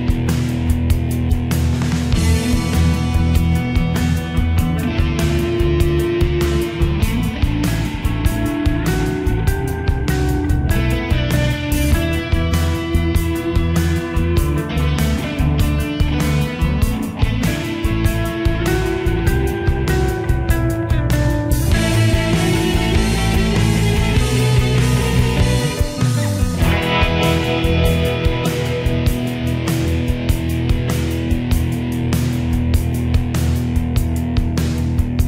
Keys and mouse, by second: 1.4 click, 7.1 middle click, 11.3 click, 22.8 middle click, 25.9 click, 33.1 middle click.